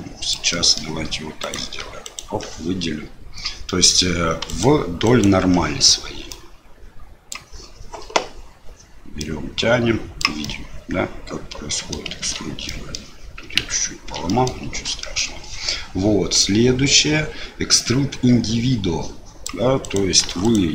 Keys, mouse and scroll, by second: 0.6 middle click, 1.4 click, 2.0 alt+click, 3.7 middle click, 4.4 click, 5.0 alt+click, 6.3-7.4 drag, 9.3-10.4 drag, 10.5-12.0 middle drag, 12.1 ctrl+z, 12.6 click, 13.6 ctrl+z, 14.3 click, 15.0 shift+click, 16.7-19.4 drag, 19.8 click, 20.4 alt+click.